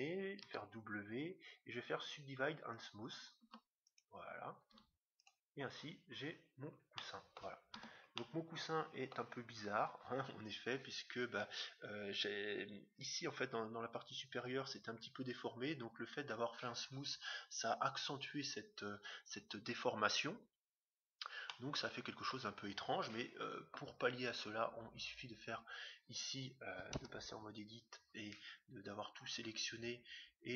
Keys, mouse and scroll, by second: 0.4 w, 3.3 w, 4.6 w, 6.0-9.7 middle drag, 7.7 Tab, 9.9-10.8 scroll down 1, 10.8-11.7 scroll down 1, 11.7 middle click, 11.8-13.1 scroll up 1, 13.1-14.1 scroll up 1, 14.1-14.8 scroll down 1, 14.8 scroll down 1, 21.4-23.2 middle drag, 26.9 Tab, 30.3-30.5 scroll down 1.